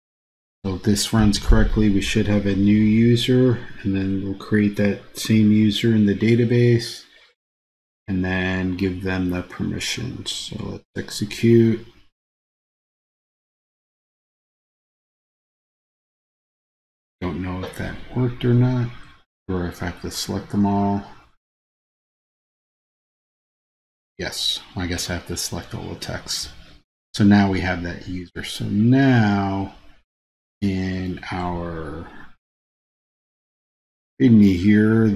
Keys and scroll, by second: 19.0 super+a.